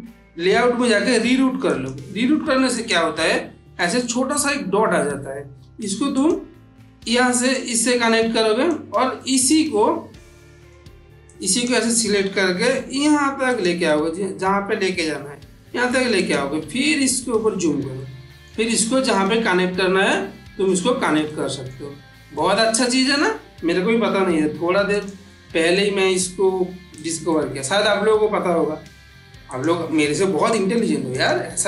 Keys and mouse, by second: 1.6 click, 2.6 click, 3.2-3.8 ctrl+middle drag, 5.5 g, 6.7 click, 7.4-8.6 drag, 9.4-10.6 middle drag, 11.1-11.7 click, 12.2 g, 13.4 click, 13.7-14.4 middle click, 15.0 g, 16.0 click, 16.7-17.6 ctrl+middle drag, 18.7-19.3 ctrl+middle drag, 20.9 ctrl+middle click, 21.1-21.7 ctrl+middle drag, 23.9 g, 24.8 click, 25.1-25.8 middle click, 26.3 g, 26.9 click, 27.1-27.8 middle click, 28.4 g, 29.4 click, 30.4 g, 31.0 click.